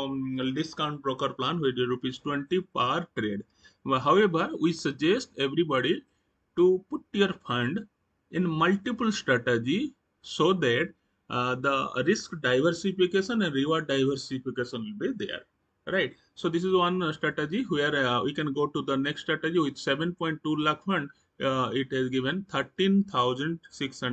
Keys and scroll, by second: 16.7 Right.